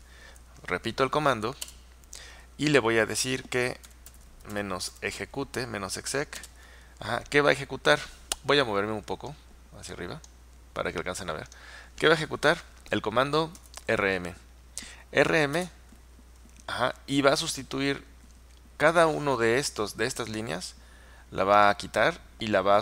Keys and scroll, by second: 1.7 space, 3.7-5.1 typing, 6.4 typing, 13.4-14.3 typing, 15.6 typing.